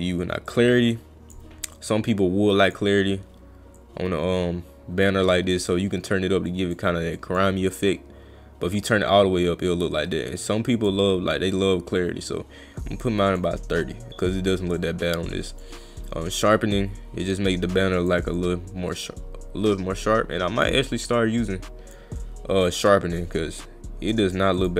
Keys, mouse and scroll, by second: 0.5 click, 1.8 click, 3.8-5.5 drag, 6.5 drag, 7.2 drag, 9.0-10.9 drag, 12.0 click, 14.8-15.6 drag, 16.5-18.1 drag, 18.4-21.9 drag, 24.2 click, 24.6 click.